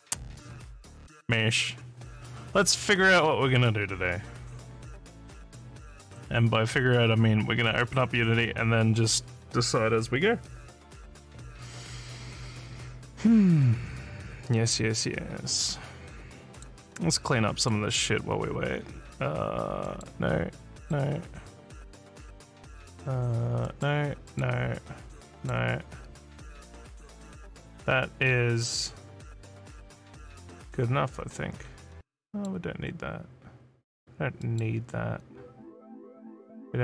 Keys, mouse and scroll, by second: 5.4 click, 7.6 click, 16.5 click, 17.6 click, 19.8 middle click, 20.8 middle click, 23.6 middle click, 24.3 middle click, 25.3 middle click, 32.2 middle click, 34.4 middle click.